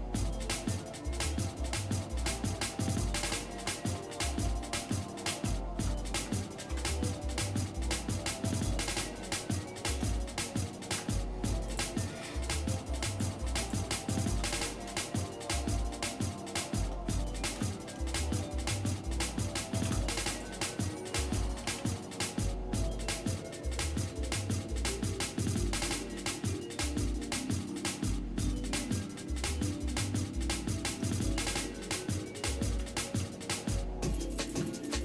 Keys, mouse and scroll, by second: 3.1 ctrl+Tab, 4.3 ctrl+z, 4.8 ctrl+z, 5.3 ctrl+z, 6.6 ctrl+KP_Add, 7.6-10.0 shift+middle drag, 10.9 Delete, 12.3 shift+middle click, 13.1 click, 13.6 alt+shift+click, 14.0 alt+shift+click, 15.4-16.9 shift+middle drag, 17.5 ctrl+KP_Add, 18.4 shift+middle click, 19.8 shift+d, 21.3 g, 24.1-27.6 shift+middle drag, 28.6 shift+middle click, 29.4 scroll up 1, 30.3-30.8 scroll up 2, 31.1 shift+middle click, 32.7 g, 34.9 shift+middle click.